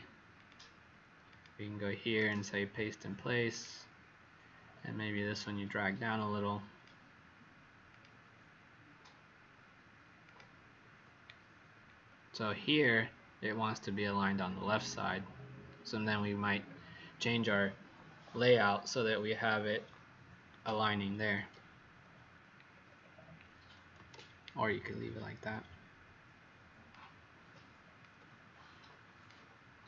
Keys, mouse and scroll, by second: 0.3 click, 2.1 right click, 3.5 click, 12.3-15.3 scroll down 1, 16.6 scroll up 2, 22.7-24.1 scroll down 2, 24.1 alt+shift+click, 27.9 alt+click.